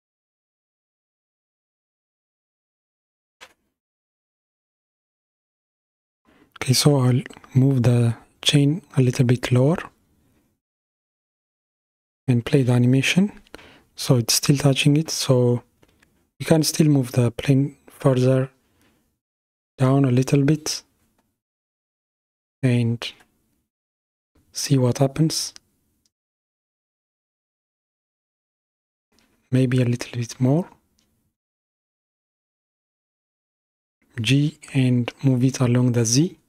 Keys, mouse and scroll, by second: 3.0 g, 10.4 KP_1, 11.8 space, 13.8 space, 15.8 g, 23.0 space, 25.9-28.9 drag, 30.6 g.